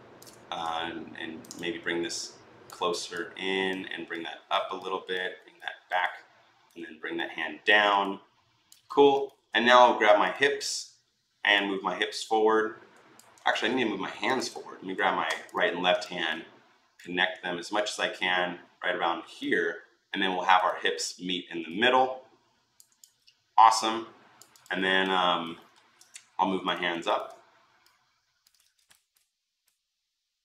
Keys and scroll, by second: 13.3 ctrl+z, 28.4 ctrl+z.